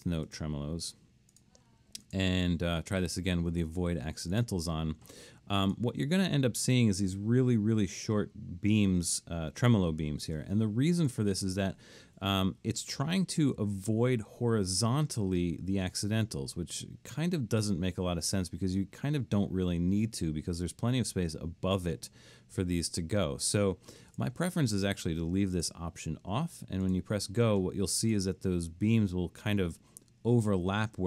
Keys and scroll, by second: 0.9 Escape.